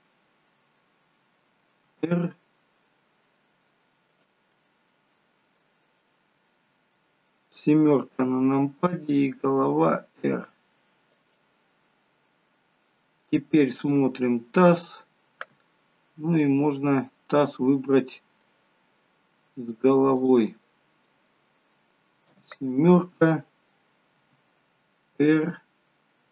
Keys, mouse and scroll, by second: 1.8 r, 4.5 middle click, 6.1 middle click, 8.2 middle click, 8.2 KP_7, 9.5 r, 13.9 click, 13.9-14.8 scroll up 2, 16.4 middle click, 18.9 middle click, 18.9-20.1 scroll down 2, 20.2 shift+click, 21.1 middle click, 22.4 KP_7, 24.2 r.